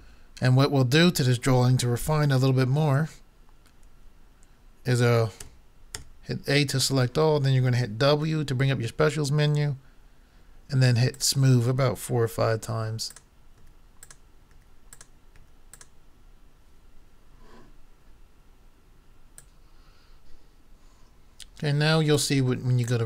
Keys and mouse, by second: 5.4 a, 5.9 a, 8.2 w, 12.6 w, 13.6 w, 14.5 w, 15.4 w, 19.4-21.1 drag, 22.1 click.